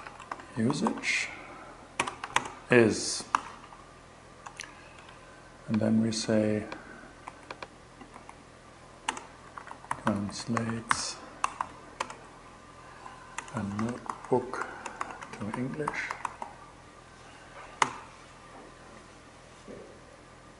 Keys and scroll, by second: 0.0-1.8 typing, 2.8 alt+8, 4.0 BackSpace, 4.3 shift+2, 6.7 super+c, 7.6 super+v, 8.5 super+space, 8.8-17.2 typing, 20.3-20.5 typing.